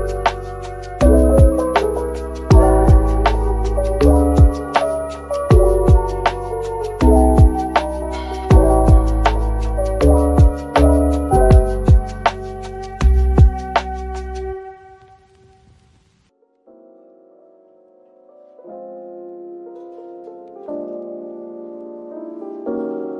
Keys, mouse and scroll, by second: 0.6-1.1 typing, 3.7 typing, 5.1-5.6 typing, 7.0 typing, 8.3-8.9 typing, 10.3-10.7 typing, 13.8 middle click, 15.1 typing, 16.1 typing, 18.2-18.5 typing, 20.4 middle click, 21.4 ctrl+r, 21.8 ctrl+scroll up 1, 22.4-23.1 scroll up 1.